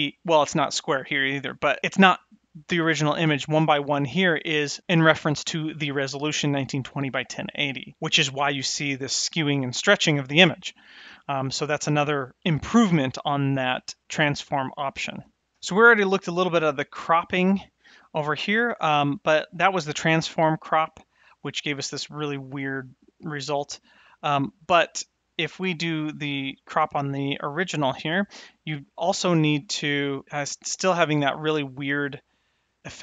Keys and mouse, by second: 15.5 shift+Left, 19.5 click, 20.9-23.0 drag, 24.2 click, 25.3 click, 27.5 click, 29.7-33.0 drag.